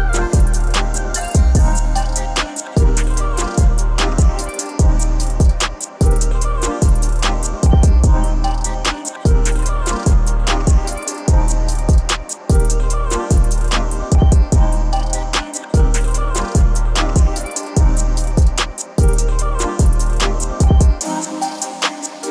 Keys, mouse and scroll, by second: 0.4-8.1 drag, 8.2-10.8 drag, 15.8 click.